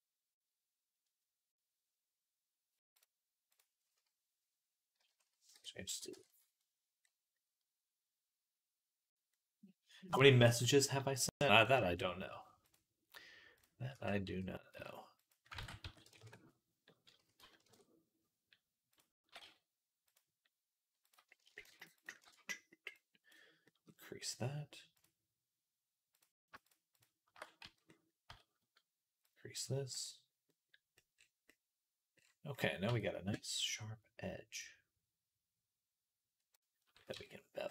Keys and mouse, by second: 0.0-8.8 drag, 5.7 x, 9.3-10.6 drag, 13.8 r, 15.4 ctrl+z, 15.7 s, 17.0 s, 19.1 g, 27.4 z, 28.1 z, 29.8 Tab, 30.0 middle click, 32.7 Tab, 37.0 Tab.